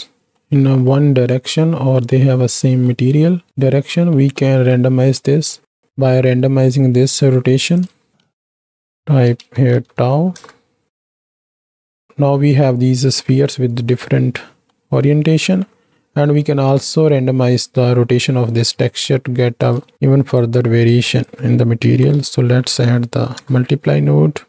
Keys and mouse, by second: 0.1 middle drag, 0.9-1.6 middle drag, 2.2-2.9 middle drag, 3.5 drag, 4.1 middle click, 4.6 z, 5.3 middle click, 5.9 middle click, 7.8 click, 8.1 shift+d, 8.5 click, 8.9-10.4 drag, 10.9 click, 11.6 click, 13.9-14.7 drag, 14.7 middle click, 16.4 middle click, 18.7 middle click, 19.6 click, 19.9 shift+d, 21.0-24.4 drag.